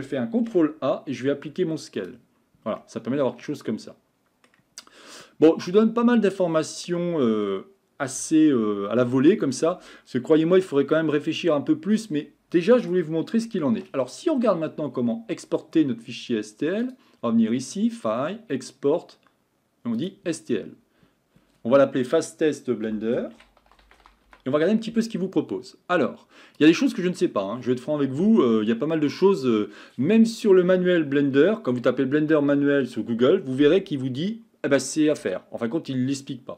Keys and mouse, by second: 2.8-4.8 middle drag, 5.6-6.9 middle drag, 16.8-20.2 drag.